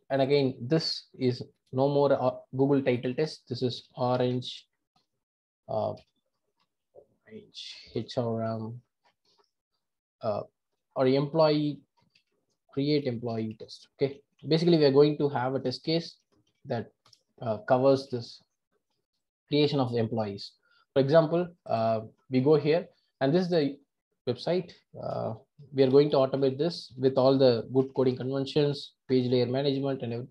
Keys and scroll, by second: 1.6 shift+F6.